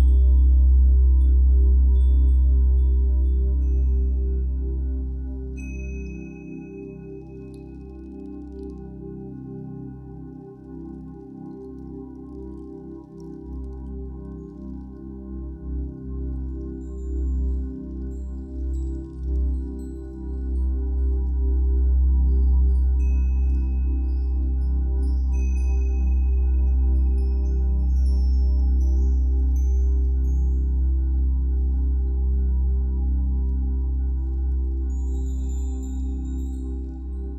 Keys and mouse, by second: 0.0-3.8 drag, 4.8 click, 7.6-8.9 drag, 9.0 drag, 10.1 click, 12.0 click, 12.6 click, 15.0 a, 15.9 Delete, 17.3 alt+g, 19.0 click, 20.9 click, 21.5 click, 24.4 shift+drag, 26.4 a, 26.9 Delete, 28.5 g, 28.8 x, 31.1-32.5 drag, 32.5 0, 34.0-35.6 ctrl+alt+drag.